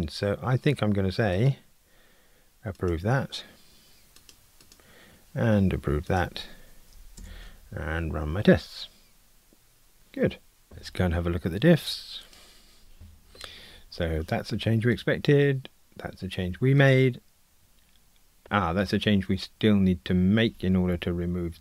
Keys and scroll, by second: 3.1 super+F11, 7.2 ctrl+r, 13.0 super+d.